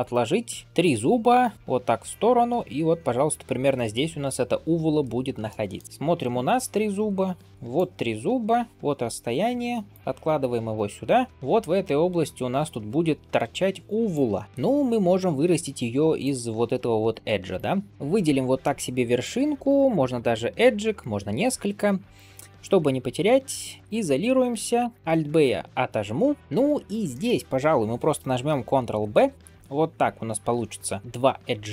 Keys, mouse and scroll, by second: 5.3 shift+middle drag, 5.8 middle click, 5.8-6.2 scroll up 1, 6.6-7.3 scroll up 2, 7.3 d, 7.6-8.8 drag, 8.8-9.8 d, 9.8 click, 10.6-11.3 d, 11.3-14.0 drag, 14.0 d, 14.1 d, 14.4 shift+middle click, 14.4-14.9 scroll down 1, 16.0 d, 16.1 click, 17.0-17.4 d, 17.4 right click, 17.9-18.5 scroll up 1, 18.5 middle click, 19.7 shift+click, 23.6 KP_Divide, 24.7 alt+b, 25.5 shift+middle click, 25.9 scroll up 2, 26.2 middle click, 26.4 alt+click, 26.6 scroll down 1, 27.0 shift+middle click, 27.3-28.3 scroll up 1, 29.0 ctrl+b.